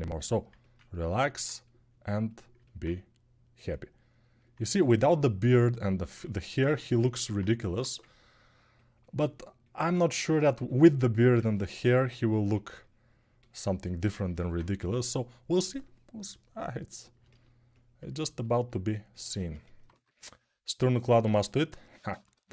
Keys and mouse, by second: 0.0 g, 7.4 1, 14.5 g, 19.7 2, 21.1 2, 22.1 1.